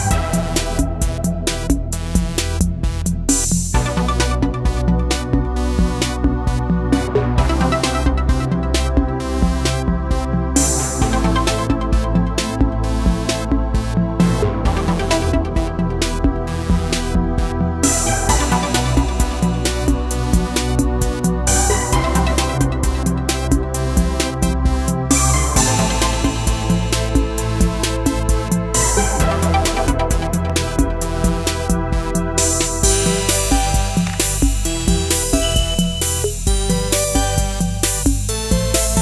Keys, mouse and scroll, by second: 19.7-28.1 drag, 36.5 click, 38.4-39.0 drag.